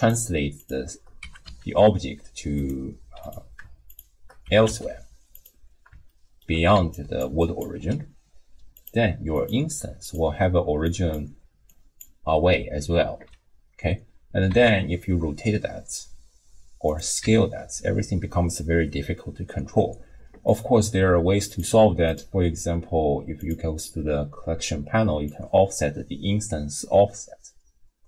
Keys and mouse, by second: 0.0-1.0 shift+drag, 1.2 g, 3.2 click, 3.9 shift+click, 4.5 g, 6.1-6.5 shift+drag, 6.7 d, 6.9 click, 7.2 d, 7.4 click, 7.4-7.8 d, 8.8 click, 9.3 click, 10.6-12.4 d, 10.8 click, 11.7 click, 14.5 r, 17.2 s, 21.5 click, 22.1-23.5 drag, 25.3-28.0 drag.